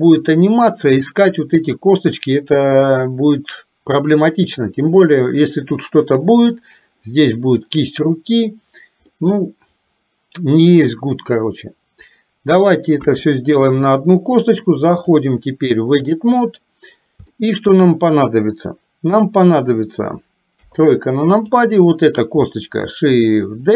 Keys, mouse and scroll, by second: 9.2-12.7 middle drag, 13.1 KP_1, 15.1-16.3 drag, 17.4 shift+middle click, 20.6 KP_3.